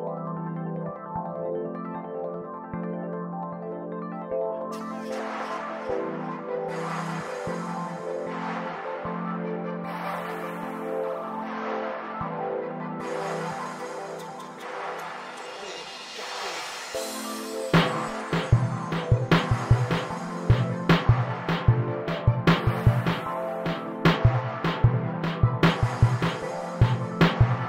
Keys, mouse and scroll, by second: 0.0 right click, 0.9-3.9 typing, 2.0 shift+right click, 2.8 right click, 3.7 right click, 6.5 Tab, 6.6 scroll down 6, 6.7 middle click, 7.4 click, 9.8 click, 11.7 click, 12.8 KP_0, 13.0-13.3 scroll down 10, 13.3-13.9 shift+middle drag, 13.9 scroll down 1, 14.1 z, 14.4-14.8 right drag, 14.9 scroll up 1, 15.1 right click, 15.6 click, 16.3 right click, 16.7 scroll down 4, 17.2 right click, 18.0-19.6 drag, 19.6 right click, 19.8-20.1 middle drag, 19.9 scroll up 11, 20.1 scroll down 2, 20.2-20.6 middle drag, 20.3 scroll up 1, 20.6 scroll down 1, 20.7 shift+a, 24.2 right click, 24.9 click, 25.1-27.6 typing, 26.4 Tab, 26.5-26.8 scroll up 9, 26.6 shift+middle click, 26.8 Tab, 27.4 right click, 27.5 scroll down 4.